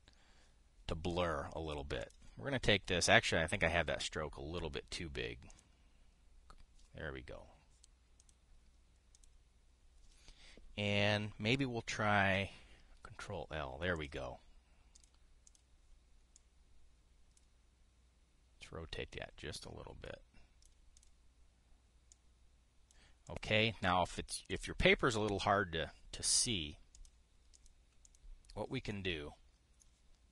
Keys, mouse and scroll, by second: 2.7 click, 4.2 click, 6.2 click, 8.9 click, 9.9 click, 13.0 ctrl+l, 14.7 click, 15.7 click, 16.2 click, 17.1-18.1 drag, 19.8-21.4 drag, 21.7 drag, 22.8 click, 23.9 click, 25.2 click, 27.6 click, 28.2 click, 28.8 click.